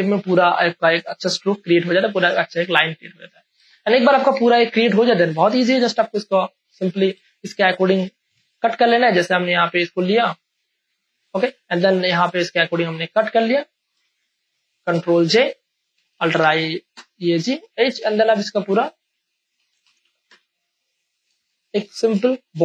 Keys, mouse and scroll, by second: 1.0 space, 1.2 ctrl+click, 1.7 click, 2.6 Return, 3.6 ctrl+space, 3.8 ctrl+click, 4.1 ctrl+space, 4.6 ctrl+space, 5.1 click, 5.7 ctrl+click, 6.6 m, 7.2 space, 7.4 ctrl+click, 8.3 v, 9.0-11.8 drag, 11.8 m, 13.1 click, 13.1 m, 14.0 space, 14.3 click, 14.5 space, 15.3 ctrl+j, 16.1 ctrl+a, 16.4 alt+e, 16.9 h, 19.1 ctrl+j, 19.5 ctrl+a, 19.8 alt+e, 20.0-21.4 typing, 21.1 click, 21.6 ctrl+click, 21.9 ctrl+d.